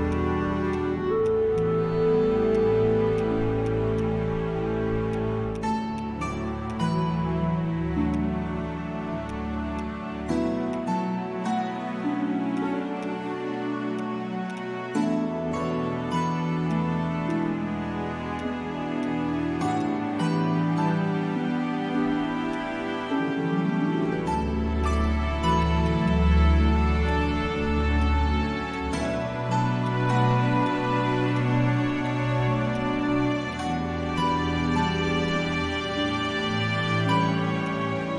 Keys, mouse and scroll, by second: 13.6-14.3 scroll down 1, 14.5 double click, 15.3-15.6 scroll down 1.